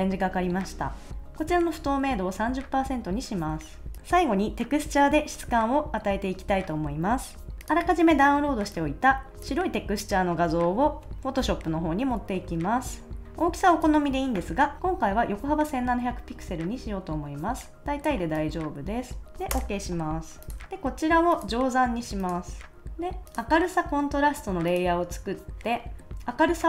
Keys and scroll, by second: 7.5 a, 19.5 Return, 20.6 super+s, 26.1 5.